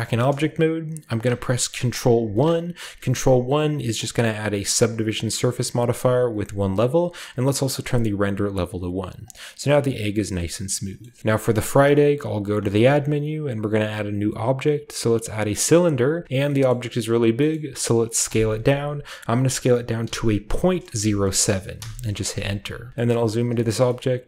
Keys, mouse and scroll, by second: 0.2-2.1 shift+middle drag, 2.2 ctrl+1, 3.9 click, 5.8 click, 7.9 click, 9.2 click, 10.3-11.0 scroll up 1, 10.3-11.0 drag, 11.0-12.3 ctrl+middle drag, 11.0 scroll up 1, 11.2 ctrl+b, 12.6 shift+a, 15.2 click, 15.8-16.7 drag, 15.8-17.4 scroll down 1, 16.7 middle click, 17.0-17.4 middle drag, 17.4-18.3 scroll up 1, 17.5-19.0 middle drag, 18.3-19.0 scroll up 1, 18.3 s, 20.0-20.9 typing, 21.8 Return, 22.5-24.2 scroll up 1, 23.1-23.6 shift+middle drag, 23.6 typing, 23.7 shift+middle drag, 24.0 shift+middle click.